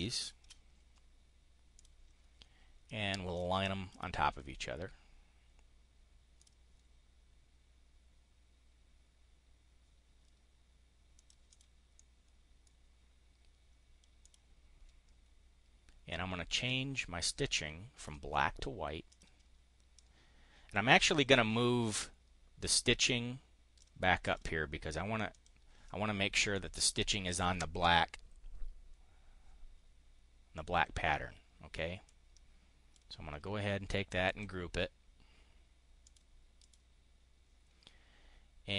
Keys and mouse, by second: 0.1 shift+click, 1.7 click, 2.8 click, 3.8 click, 6.3 click, 11.0 click, 11.8 click, 14.1 click, 16.6-18.1 drag, 19.0 click, 19.8-21.0 drag, 21.8-23.8 drag, 24.2 click, 25.3 click, 31.8-32.9 drag, 34.2 click, 36.0 click, 36.5 click.